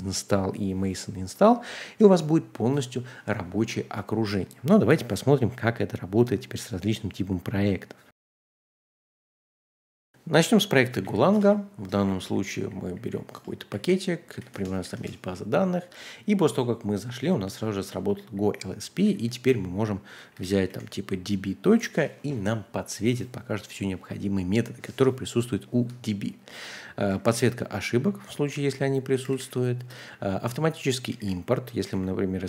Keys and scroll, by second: 1.4-4.2 typing, 10.1-21.2 typing, 25.7-30.0 typing, 31.2-32.4 typing.